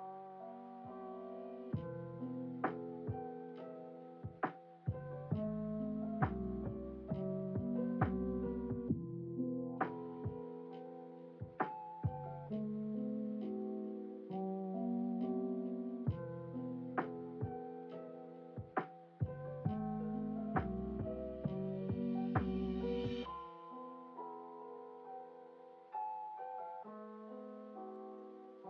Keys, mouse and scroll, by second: 0.4 g, 5.7-8.3 drag, 9.1 click, 10.2 click, 10.8 click, 12.4 g, 17.1 click, 18.0 g, 22.4-24.3 drag, 25.7 g.